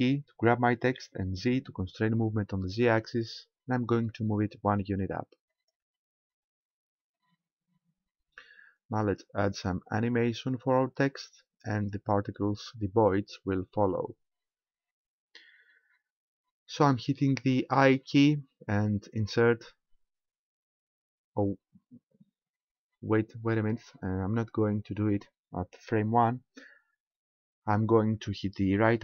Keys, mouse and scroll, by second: 0.9 g, 5.7 ctrl+click, 8.1-9.6 scroll down 1, 11.1-12.4 scroll up 1, 12.6 scroll down 1, 13.9 scroll up 1, 17.9 i.